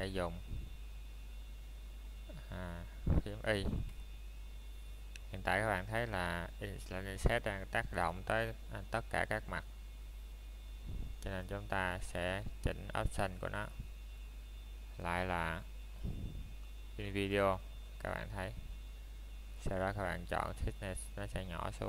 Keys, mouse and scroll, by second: 0.3 shift+middle click, 0.7 scroll up 1, 2.3 c, 3.0 middle click, 9.9 right click, 10.2-10.5 scroll down 1, 10.5 middle click, 11.2 shift+middle click, 13.0 shift+middle click, 13.3 scroll up 1, 14.2 middle click, 16.0-17.0 scroll down 1, 17.0 middle click, 18.3-18.9 scroll up 1, 19.0 shift+middle click.